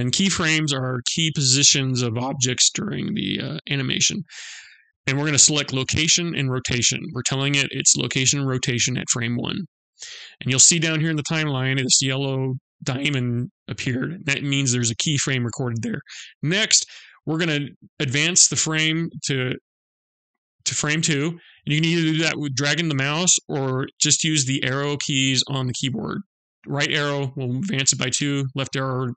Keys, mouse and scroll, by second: 19.0 click, 25.4 Right, 27.8 Left.